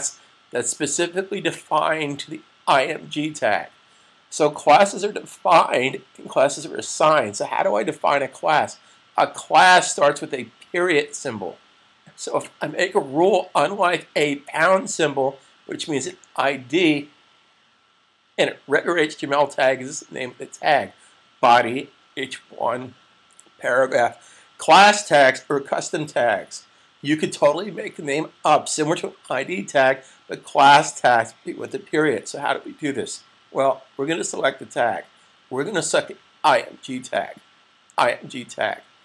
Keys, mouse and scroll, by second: 34.2 click, 37.0 click.